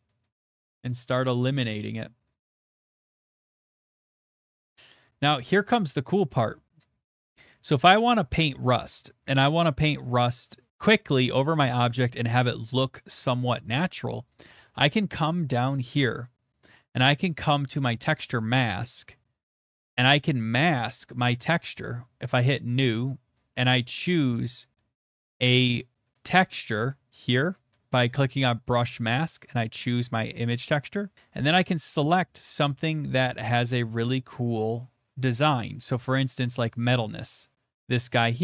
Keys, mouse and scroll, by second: 0.1 click, 0.3 click, 1.2 click, 2.2 click, 2.4 click, 2.6 middle click, 2.9 click, 3.0 click, 4.0 click, 4.2 shift+middle click, 4.4 middle click, 5.2 click, 5.8 middle click, 7.5 click, 8.4 click, 8.9 scroll, 9.6 middle click, 10.7 click, 10.7 scroll, 12.3 right click, 14.5-15.3 scroll, 14.6 middle click, 17.8 middle click, 17.9 click, 20.0 click, 20.9 click, 21.7 click, 23.4 click, 25.1 click, 28.0 click, 29.4 click, 31.5 middle click, 32.7 middle click, 32.7 middle click, 32.8 middle click, 32.9 middle click, 32.9 middle click, 33.0 middle click, 33.3 middle click, 33.3 middle click, 33.4 middle click, 33.5 middle click, 33.8 middle click, 33.8 middle click, 35.4 middle click, 35.4 middle click, 36.7 click, 36.9 click.